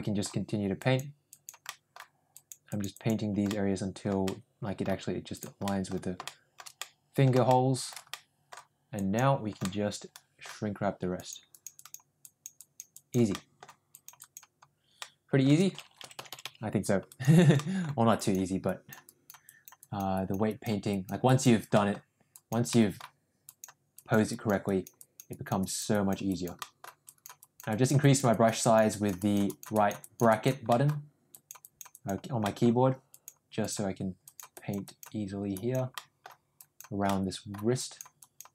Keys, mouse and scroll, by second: 0.7 click, 1.2 click, 1.6 middle click, 2.2 click, 2.6 click, 2.9 click, 3.4 middle click, 4.2 middle click, 5.2 click, 5.6 middle click, 6.2 shift+middle click, 6.7 middle click, 7.4 shift+middle click, 8.1 middle click, 8.9 click, 9.5 middle click, 11.1 click, 11.5 click, 11.7 click, 12.2 click, 12.5 click, 12.9 click, 13.3 middle click, 13.8 click, 14.1 click, 14.9 middle click, 15.9 ], 16.1 ], 16.2 ], 16.3 ], 17.0 click, 17.5 middle click, 18.1 click, 18.6 click, 19.0 click, 19.4 click, 19.7 click, 20.1 click, 20.4 click, 20.8 click, 21.2 click, 21.7 middle click, 22.2 click, 22.7 middle click, 23.4 click, 23.9 click, 24.2 click, 24.6 click, 24.9 click, 25.2 click, 25.5 click, 25.9 click, 26.2 click, 26.5 middle click, 27.0 click, 27.3 click, 27.6 click, 27.9 click, 28.2 click, 28.5 click, 28.8 click, 29.1 click, 29.4 click, 29.7 click, 29.9 click, 30.2 click, 30.6 middle click, 31.2 click, 31.6 click, 31.9 click, 32.4 middle click, 33.0 click, 33.5 click, 34.2 click, 34.5 click, 34.8 click, 35.4 click, 35.9 middle click, 36.5 click, 37.0 middle click, 37.8 click, 38.1 click.